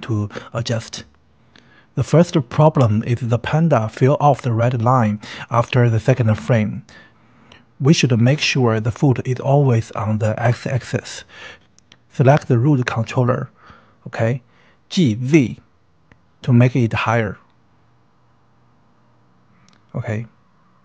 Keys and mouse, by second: 0.5 shift+drag, 0.7-1.4 shift+middle drag, 2.2-4.8 drag, 5.6 Right, 7.2 Right, 12.3-12.9 middle drag, 13.5 KP_1, 14.9 a, 16.3 click, 16.6 n, 17.5 g, 17.8 z, 20.3 click.